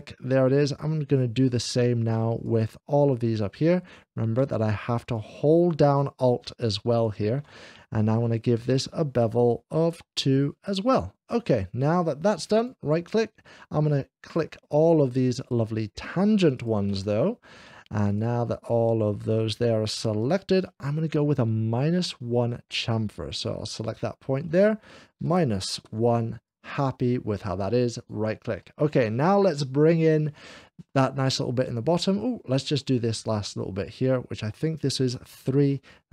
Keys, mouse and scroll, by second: 0.2 middle click, 2.2 alt+click, 4.4 alt+s, 4.9 alt+shift+click, 6.7 alt+shift+click, 8.2 alt+shift+click, 12.4 right click, 13.1 middle click, 14.1 click, 15.5 shift+click, 16.9 shift+click, 17.5 middle click, 18.2 shift+click, 19.1-20.5 shift+drag, 20.5 shift+click, 21.1 middle click, 23.6 click, 27.9-28.9 right drag, 28.9-31.1 middle drag, 31.8 middle click, 32.2 middle click, 32.9-35.5 drag, 35.0 3.